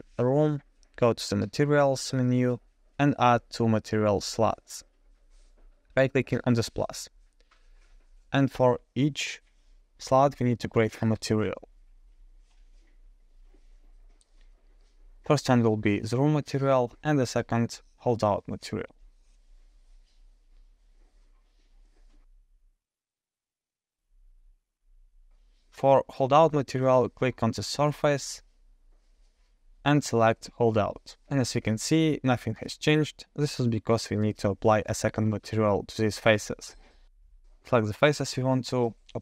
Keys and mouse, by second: 2.9 click, 6.2 click, 7.2 click, 10.2 click, 11.8 click, 12.6 click, 13.7 click, 14.5 click, 14.8-16.6 drag, 17.1-18.5 drag, 17.2 o, 18.9 click, 19.4 click, 19.6-23.1 drag, 24.5 click, 27.6-31.0 drag, 36.3 Tab.